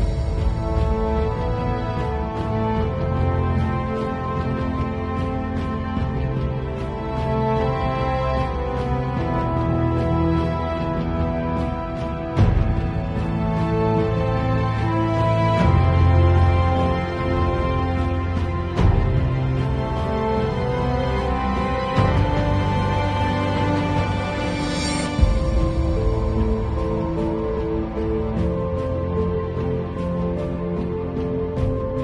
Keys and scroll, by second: 2.0 [, 5.0 0, 10.1 x, 11.3 [, 14.0 [, 15.3 [, 17.2 [, 21.0 x, 21.9 3, 22.5 ], 24.6 [, 29.4 v.